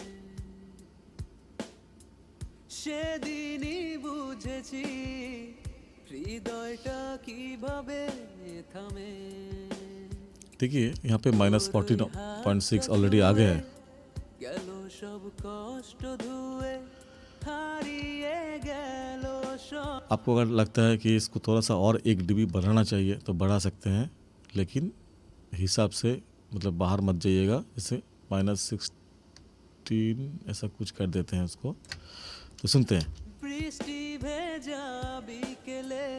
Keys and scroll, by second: 19.9 space, 33.0 space.